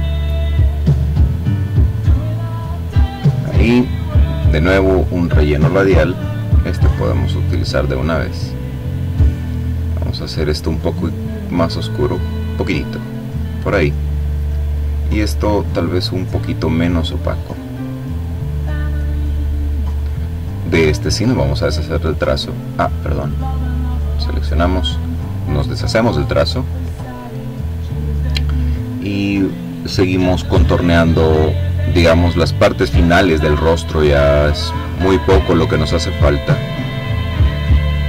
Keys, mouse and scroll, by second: 1.2 click, 2.2 click, 3.9 click, 5.4 click, 6.6-9.2 drag, 9.7 click, 10.7 click, 13.9 click, 16.0-17.8 drag, 17.8 click, 19.9-20.9 drag, 23.1 click, 25.1 click, 29.7 click, 32.3 click, 33.0 click, 34.1 click, 34.8 click, 35.9-37.0 drag.